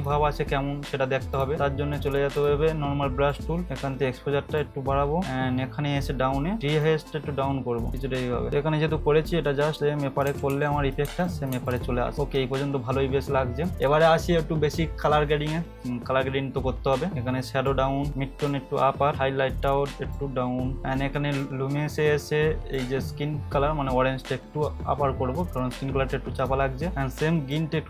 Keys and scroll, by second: 10.3 [, 10.5 [, 11.0 ], 11.5 ], 12.1 ctrl+=.